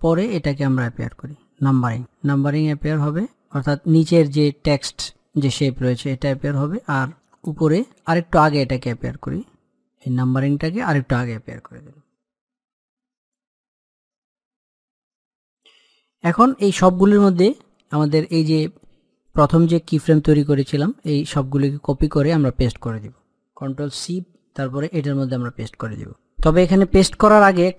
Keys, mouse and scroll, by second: 6.2 click, 7.1 scroll up 1, 7.4-12.2 drag, 12.2 i, 13.1-19.1 drag, 19.1-24.5 drag, 24.5 ctrl+c, 24.7 click, 27.5-27.7 scroll down 1.